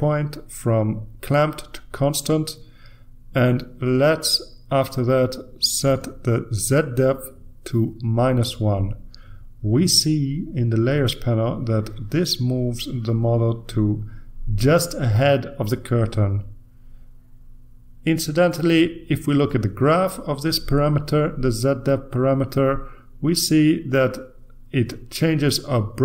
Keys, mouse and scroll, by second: 1.8 click, 3.2 click, 7.2 click, 8.9 click, 11.1 click, 12.0-14.1 drag, 14.2-15.1 typing, 15.5 Return, 18.8-20.4 drag, 22.3-26.0 drag.